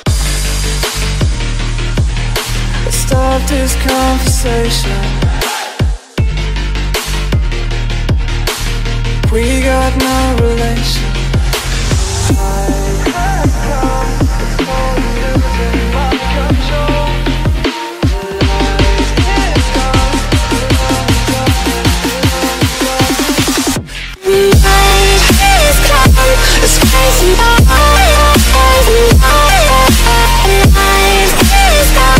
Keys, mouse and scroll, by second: 0.5 click, 0.8 alt+click, 1.0 click, 1.1 click, 1.6 click, 2.4 click, 3.4 click, 4.1 click, 5.3 click, 6.8 click, 7.1-8.1 typing, 11.1 click, 11.7 click, 12.4 click, 13.9 click, 15.0 click, 17.6 click, 19.6-20.7 typing, 19.7 click, 21.3 click, 22.6 middle click, 22.7 middle click, 24.5 click, 24.9-25.7 typing, 27.8 click, 29.4 click, 29.9 click.